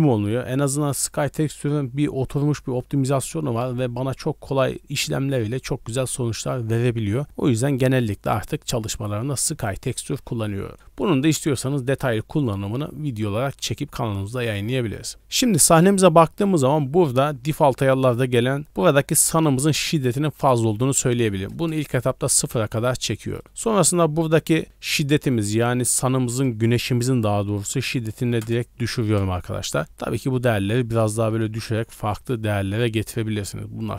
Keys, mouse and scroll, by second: 10.7-12.0 drag, 14.1 middle click, 14.4 scroll up 1, 14.9 middle click, 15.1 scroll up 2, 15.5 scroll down 2, 17.2-17.9 scroll up 4, 20.7 click, 22.8 middle click, 23.4 scroll down 1, 23.6 middle click, 23.7 scroll up 1, 24.9-28.4 drag, 29.5 middle drag, 30.9-32.0 drag, 33.2 middle click.